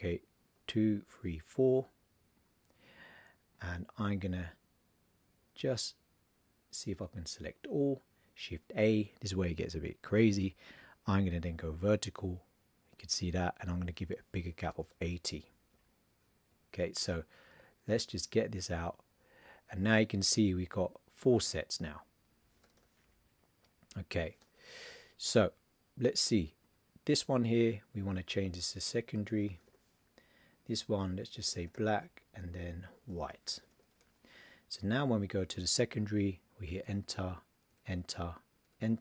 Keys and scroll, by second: 0.5 super+d, 8.6 shift+a, 28.5 shift+s, 31.3 shift+b, 33.0 shift+w.